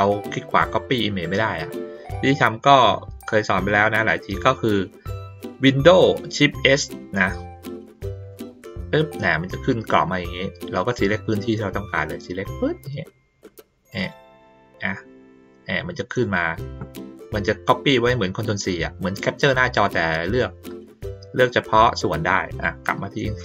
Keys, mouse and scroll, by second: 12.1-14.1 drag, 22.5 click.